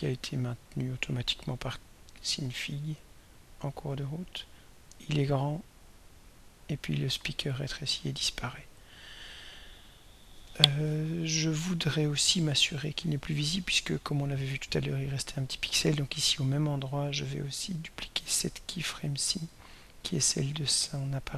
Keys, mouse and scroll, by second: 0.0-1.0 drag, 2.5-9.2 drag, 15.7 click, 19.0 click, 20.2 right click.